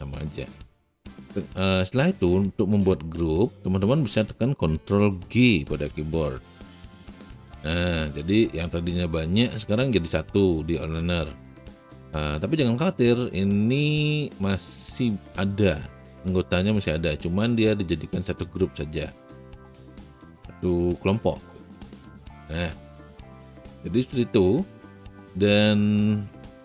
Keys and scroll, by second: 5.6 ctrl+g, 20.3 w.